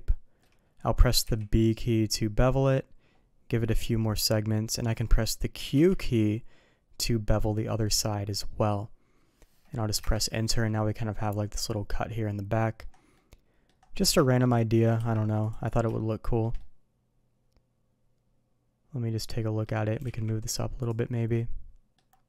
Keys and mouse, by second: 10.6-12.8 middle drag, 13.1-13.6 middle drag, 14.2 shift+middle drag, 14.5 middle click, 14.9 q, 15.9-16.4 middle drag, 16.5-19.6 middle drag, 21.3-21.9 middle drag.